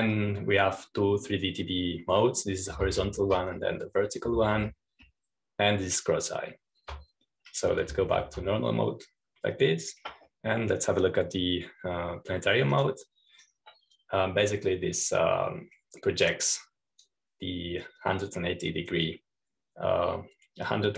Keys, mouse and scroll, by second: 0.2 ctrl+shift+s, 4.9 ctrl+shift+s, 6.5 ctrl+shift+s, 10.0 ctrl+s, 14.7 click, 15.8-19.6 drag.